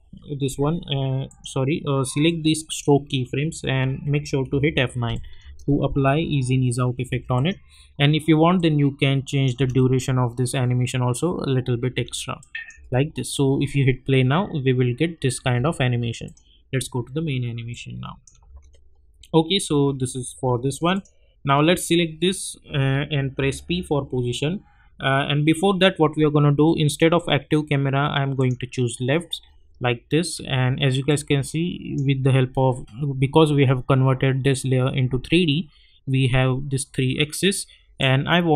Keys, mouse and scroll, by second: 4.4 F9, 5.1 click, 5.4 space, 7.3 click, 9.5 space, 11.9 space, 12.4 click, 12.7 space, 15.4 space, 15.6 -, 16.2 click, 18.5 space, 20.9 click, 23.3 p, 26.8 click, 29.9-30.4 alt+scroll up 1, 31.1-34.3 drag, 38.0-38.5 drag.